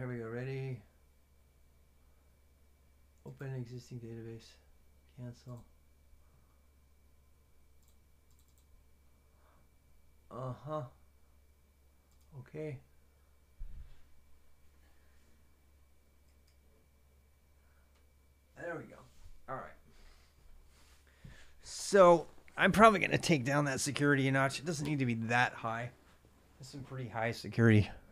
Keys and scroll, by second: 0.0-28.1 typing.